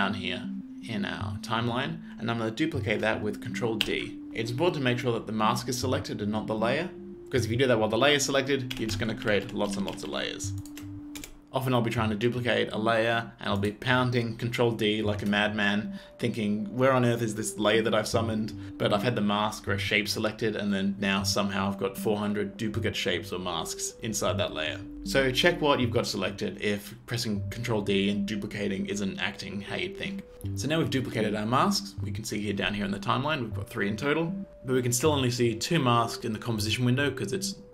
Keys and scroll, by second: 3.5 ctrl+f, 3.9 ctrl+d, 8.4 ctrl+d, 10.3 d, 11.2 BackSpace.